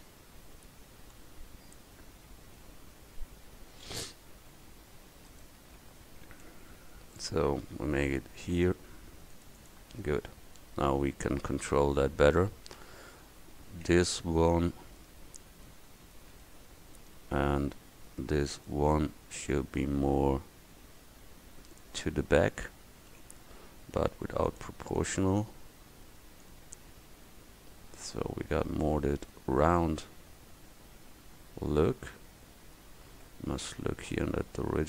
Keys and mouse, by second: 6.6 ctrl+z, 8.4 ctrl+r, 12.4 middle click, 15.1 middle click, 16.0-19.9 drag, 23.2 ctrl+z, 29.1 Tab, 31.8 middle click, 32.1 middle click, 32.9 middle click.